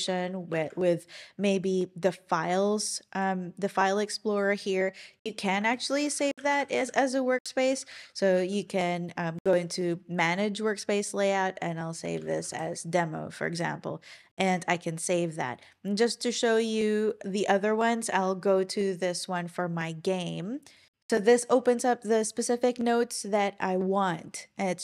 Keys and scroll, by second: 14.3 typing.